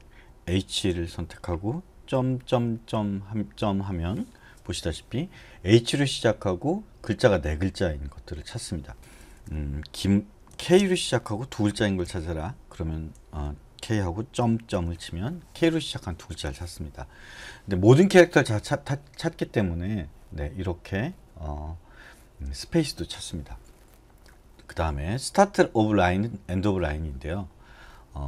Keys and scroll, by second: 0.6 h, 2.1 ., 2.5 ., 2.9 ., 3.6 ., 9.0 BackSpace, 9.0 BackSpace, 9.2 BackSpace, 9.3 BackSpace, 10.7 k, 11.6 ,, 12.0 ,, 13.1 BackSpace, 13.3 BackSpace, 14.4 ., 14.7 ..